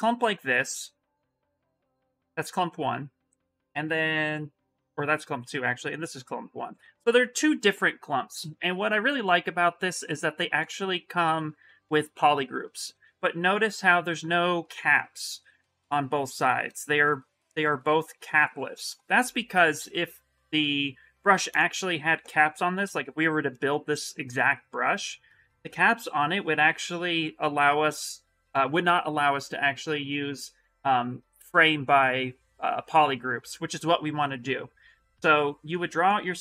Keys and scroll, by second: 24.8 s.